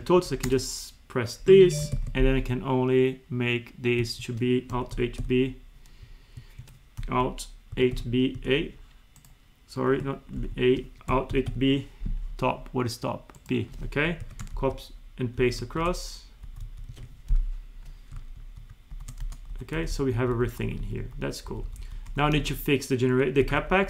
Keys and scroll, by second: 0.2 alt+=, 1.7 Up, 2.0 alt+2, 4.0 Escape, 6.4 Escape, 10.4 ctrl+z, 14.2 ctrl+c, 14.5 ctrl+shift+Right, 15.8 ctrl+shift+Right, 16.4 Left, 16.6 Right, 16.9 Escape, 18.4 ctrl+shift+Right, 19.6 Left, 19.8 Right, 20.3 Left, 21.5 Right, 22.1 Up, 23.4 ctrl+c, 23.6 Up.